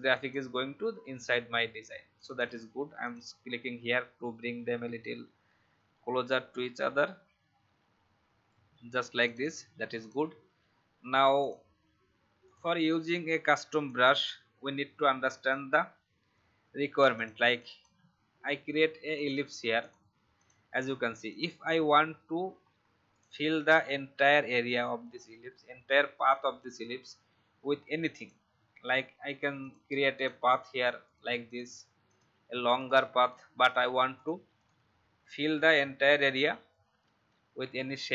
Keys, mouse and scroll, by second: 3.8 click, 4.3 Left, 4.4 Left, 6.8 Right, 7.0 Right, 7.3 Right, 7.5 Right, 7.8 Right, 8.0 Right, 9.2 click, 13.8 alt+shift+click, 16.3 shift+x, 16.8 shift+v, 17.1 click, 22.5 shift+scroll up 1, 23.1 click, 23.6-27.4 alt+scroll up 1, 27.6-28.1 alt+scroll down 1, 28.1-34.5 drag, 36.8 Escape, 37.6 v, 38.0-38.1 drag.